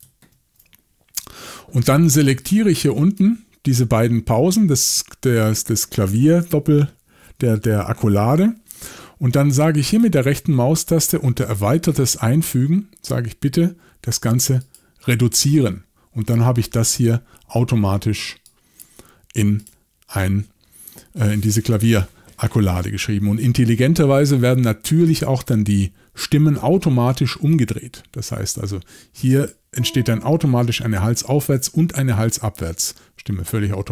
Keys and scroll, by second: 0.3 super+c.